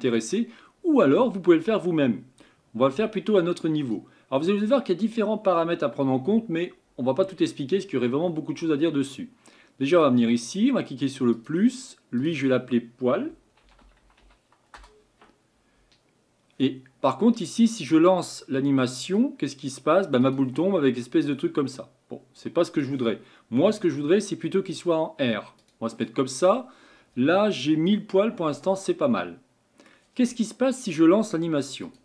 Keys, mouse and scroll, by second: 9.9 click, 11.3-12.2 drag, 12.3-15.5 drag, 17.1 scroll up 2, 17.4 scroll down 2, 19.0-25.7 drag, 28.4-31.8 middle drag, 31.8-32.0 drag.